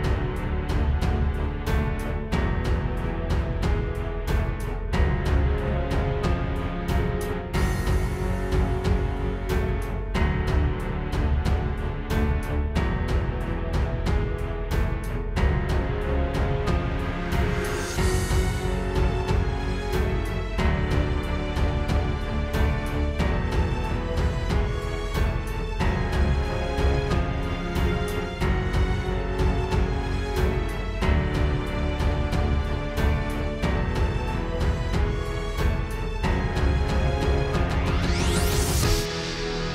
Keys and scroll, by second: 2.0 space, 5.0 space, 5.5 space, 7.4 space, 10.2 space, 11.3 space, 13.5 space, 14.4 space, 17.6 space, 18.0 space, 19.7 space, 22.0 space, 23.7 space, 25.0 space, 25.4 space, 28.3 space, 30.3 space, 30.8 alt+super+space, 31.4 space, 33.3 space, 36.2 space, 36.8 space.